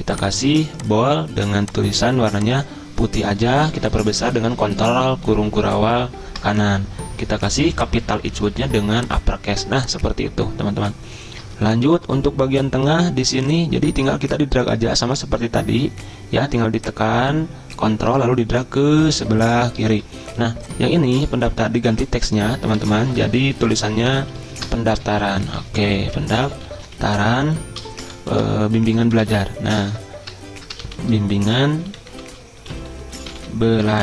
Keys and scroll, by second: 3.9 ctrl+], 4.0 ctrl+], 4.1 ctrl+], 4.3 ctrl+], 4.6 ctrl+], 5.4 ctrl+[, 5.6 ctrl+[, 5.9 ctrl+[, 22.8 Delete, 24.1 ctrl+shift+Right, 24.2 ctrl+shift+Right, 24.9-28.5 typing, 29.1 ctrl+shift+Right, 30.8-34.0 typing.